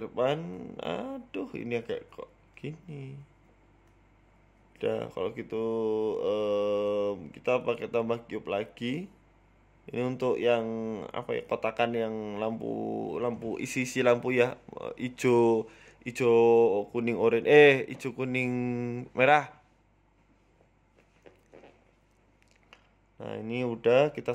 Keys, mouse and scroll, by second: 0.2 g, 1.7 shift+s, 2.5 middle click, 4.0 KP_1, 4.9-5.6 scroll up 3, 5.3 shift+a, 8.2 shift+a, 9.3-10.2 scroll down 4, 9.6 s, 10.4 s, 11.4 s, 11.6 s, 13.1 g, 14.5 s, 15.2 scroll up 1, 15.8-16.6 scroll up 2, 15.8 g, 17.7 middle click, 18.2-18.9 scroll up 2, 18.9-19.7 scroll up 1, 18.9 g, 20.0 s, 21.3 KP_1, 21.7 Tab, 21.8 scroll up 2, 22.9 click, 22.9-23.3 scroll up 1, 23.5 click, 23.9 shift+click, 24.0 shift+click.